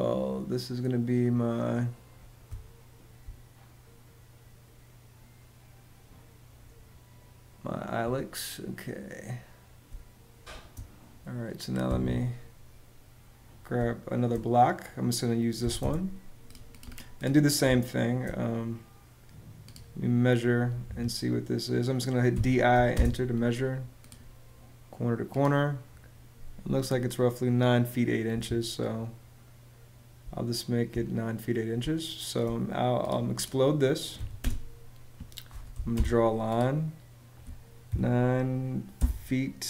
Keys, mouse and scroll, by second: 2.2 space, 9.6 space, 11.6 Escape, 13.5 space, 15.3 m, 15.5 space, 17.4 space, 20.7 Escape, 22.0 d, 22.4 i, 22.6 space, 28.0 Escape, 30.0 space, 31.5 space, 33.9-35.9 typing, 37.6 9, 38.7 '.